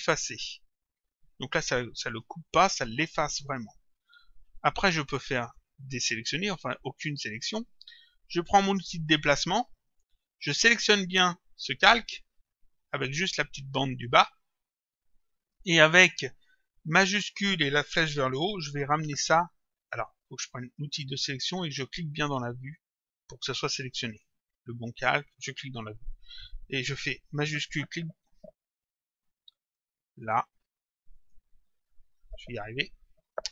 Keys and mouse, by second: 2.0 click, 5.4 click, 6.9 click, 8.6 click, 10.0 click, 11.7 click, 14.9 click, 16.8 click, 21.5 click, 22.6 click, 24.2 click, 29.7 click, 31.2 click.